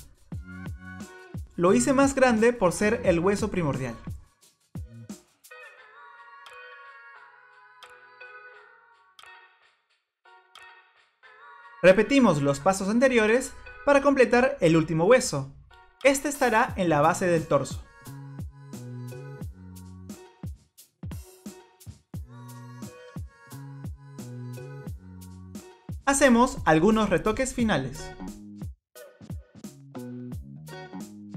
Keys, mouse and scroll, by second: 0.8 click, 2.6 middle click, 4.7 click, 5.2 click, 5.5 middle click, 6.9 click, 7.1 click, 7.9 click, 8.1 click, 8.8 click, 9.4 click, 9.7 click, 10.2 click, 10.7 click, 11.0 click, 14.3 click, 15.6 click, 18.0 shift+d, 18.6 click, 18.8 Delete, 19.0 middle click, 19.2 click, 19.5 click, 19.8 click, 20.2 click, 20.3 click, 21.0 middle click, 21.8 click, 22.0 click, 22.9 middle click, 24.5 click, 26.1 middle click.